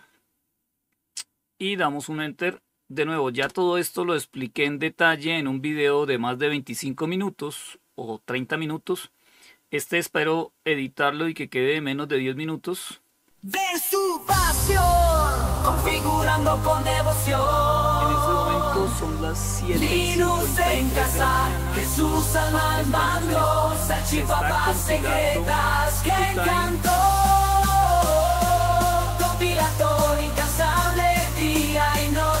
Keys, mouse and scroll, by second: 2.6 Return.